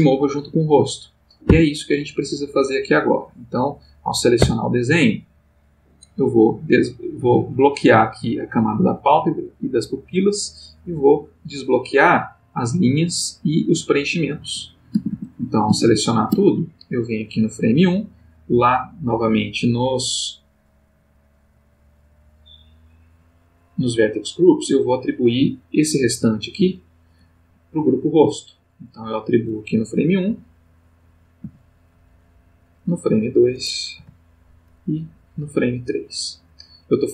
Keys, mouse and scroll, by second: 1.5 Escape, 2.2 click, 4.4 Tab, 5.9 click, 10.0 click, 10.8 click, 14.4 a, 17.3 click, 18.4 middle click, 18.9 middle click, 19.4 middle click, 21.0 click, 21.6 middle click, 22.6 middle click, 24.8 click, 26.5 a, 28.7 click, 30.2 Right, 31.4 a, 32.7 click, 33.9 Right, 35.2 click.